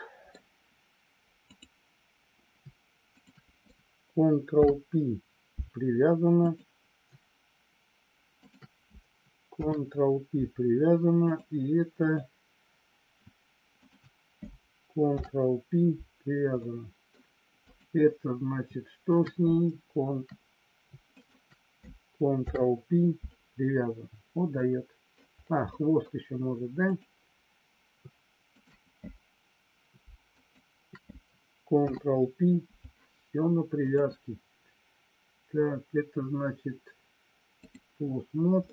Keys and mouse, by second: 1.4 click, 3.1 shift+click, 4.5 ctrl+p, 8.4 shift+click, 9.5 ctrl+p, 11.9 click, 13.7 shift+click, 15.0 ctrl+p, 16.5 middle click, 17.5 click, 19.1 click, 21.0 shift+click, 22.4 ctrl+p, 24.5 middle click, 25.6 middle click, 28.5 shift+click, 30.4 shift+click, 31.9 ctrl+p, 33.7-37.9 drag, 38.5-38.7 middle drag.